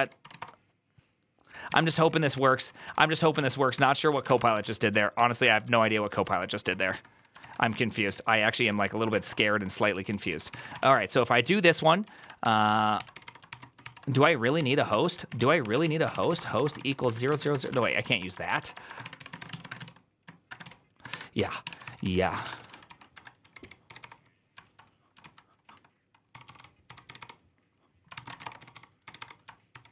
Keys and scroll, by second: 0.0-0.7 typing, 1.5 Tab, 1.8 ctrl+c, 1.9 ctrl+c, 2.3-6.2 typing, 6.5 ctrl+c, 7.3 ctrl+c, 7.7-13.5 typing, 8.5 ctrl+c, 8.5 ctrl+c, 8.9 ctrl+c, 13.7 ctrl+c, 14.8 ctrl+w, 14.9-19.5 typing, 15.2 ctrl+w, 15.3 ctrl+o, 15.5 ctrl+c.